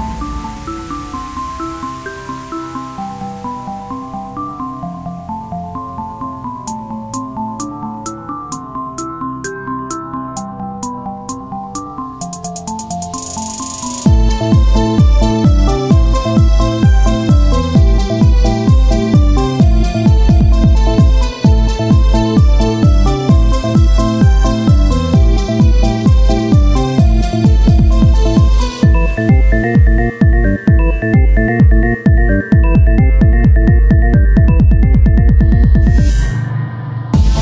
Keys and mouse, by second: 12.6 ctrl+a, 12.6 z, 12.8 Tab, 19.4 r, 20.8 click, 20.8 z, 21.3 ctrl+z, 30.6-35.8 drag.